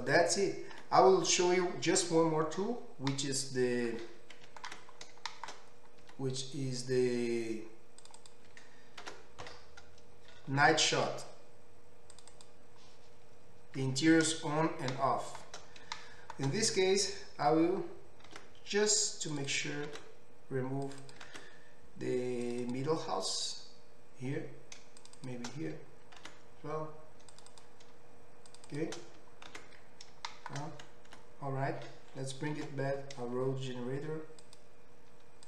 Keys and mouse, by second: 0.9 Tab, 1.2-8.0 middle drag, 6.1 Tab, 8.0 click, 8.1 middle click, 8.2 click, 9.2 ctrl+x, 12.3 click, 15.0-19.5 shift+middle drag, 18.3 ctrl+x, 19.5 click, 19.6 ctrl+middle click, 20.0 ctrl+x, 21.0 click, 21.4 ctrl+x, 22.6 click, 25.0 shift+click, 25.2 shift+click, 26.3 ctrl+x, 27.5 click, 28.5 shift+click, 28.7 shift+click, 28.8-32.7 shift+middle drag, 29.5 ctrl+x, 31.3 Tab, 32.7 alt+h, 34.4 click.